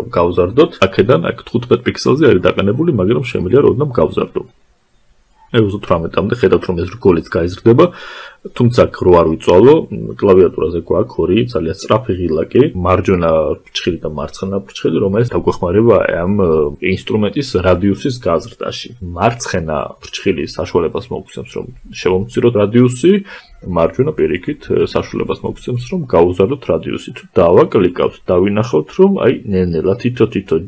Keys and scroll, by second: 20.2 [, 22.6 ].